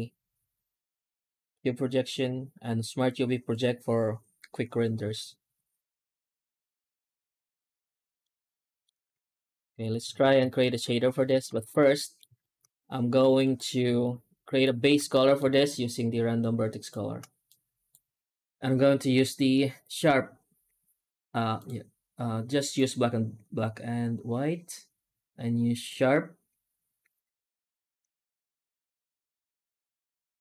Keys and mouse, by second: 7.7 Tab, 8.1-8.7 middle drag, 9.2 ctrl+space, 9.5-9.9 middle drag, 10.1 ctrl+space, 11.5 ctrl+space, 11.9 middle drag, 12.3 shift+middle drag, 13.3 right click, 13.9-14.5 shift+middle drag, 15.0 middle drag, 15.4 shift+q.